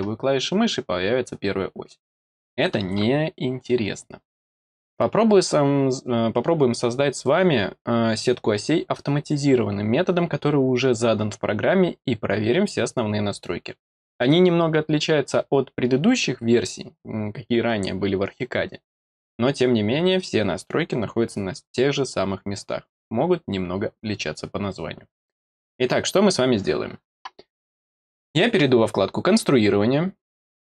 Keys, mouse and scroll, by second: 0.4-1.8 middle drag, 30.2 click.